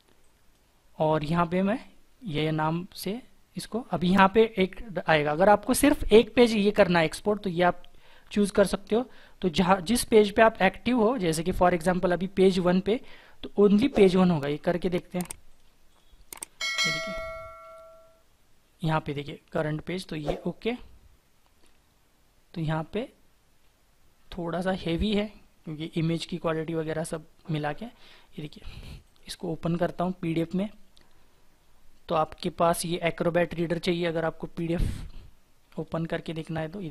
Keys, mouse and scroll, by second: 15.8 double click, 28.8 double click, 35.6 right click.